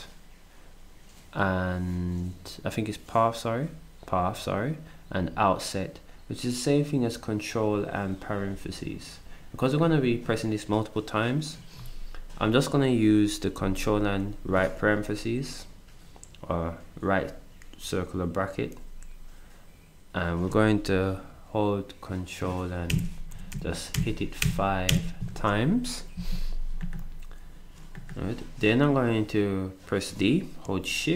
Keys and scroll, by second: 22.9 ctrl+0, 23.5 0, 23.9 0, 24.4 0, 24.9 0, 30.1 d.